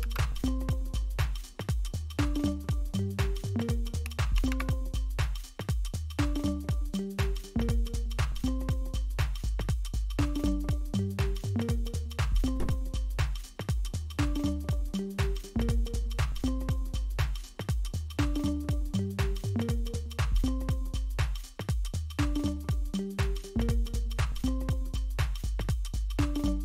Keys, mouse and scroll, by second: 4.4 super+w, 12.0-13.3 scroll down 1, 13.3-14.4 scroll down 1, 14.4-16.9 scroll down 1, 16.9 click, 25.1 click.